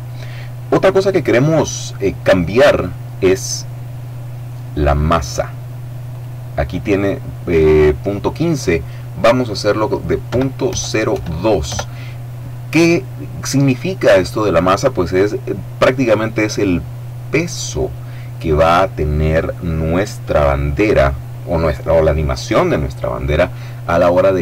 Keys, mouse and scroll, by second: 5.9 click, 10.1 KP_Decimal, 10.5 KP_0, 11.0 KP_2, 11.5 KP_Enter.